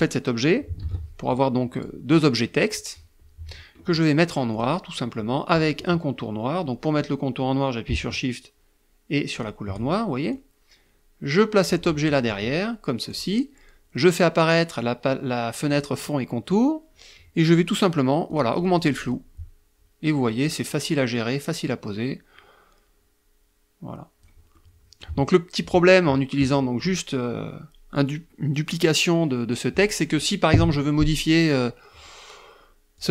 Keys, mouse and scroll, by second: 0.0 ctrl+d, 0.5 ctrl+click, 3.7 click, 8.5 shift+click, 9.5-11.1 drag, 12.3 click, 14.8 click, 17.4 click, 19.4-23.6 drag, 23.7 middle click, 25.6 middle click, 30.1 click, 32.1 click.